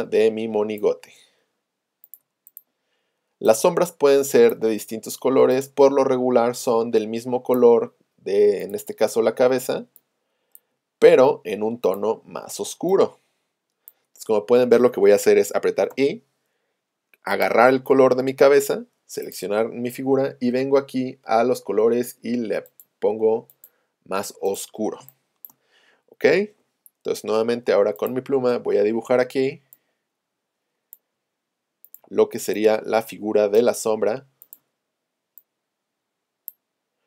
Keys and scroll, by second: 15.9 i, 18.5 v, 25.0 space, 26.5 p.